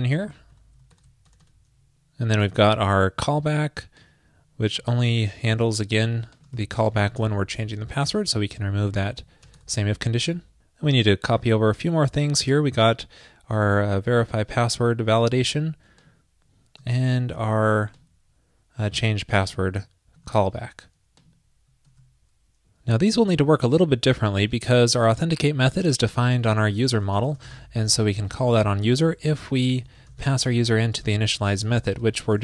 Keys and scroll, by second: 0.4 alt+BackSpace, 0.4 alt+BackSpace, 0.9 alt+BackSpace, 5.0 super+x, 6.6 super+v, 15.3 super+x, 16.9 super+v, 20.4 super+x, 21.9 super+v.